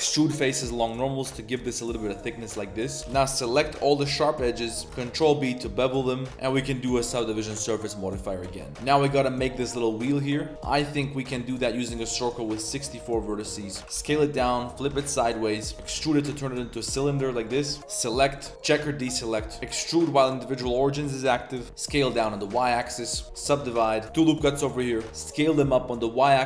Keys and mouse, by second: 3.0 2, 3.0 shift+g, 3.6 z, 3.8 click, 4.2 shift+middle click, 4.6 middle click, 4.8 ctrl+b, 4.8 z, 6.5 Tab, 6.5 ctrl+1, 6.5 ctrl+2, 7.3 click, 8.2 middle click, 10.5 Tab, 10.5 1, 10.5 shift+s, 10.5 shift+a, 12.1-13.5 drag, 13.8 Tab, 13.8 1, 13.8 shift+s, 13.8 r, 15.3 click, 15.7 s, 15.7 e, 15.7 g, 17.6 3, 17.8 click, 18.3 click, 19.2 click, 19.6 e, 21.6 s, 23.2 Tab, 23.3 ctrl+1, 23.5 ctrl+2, 23.7 Tab, 23.9 ctrl+r, 24.0 ctrl+z, 25.0 shift+s.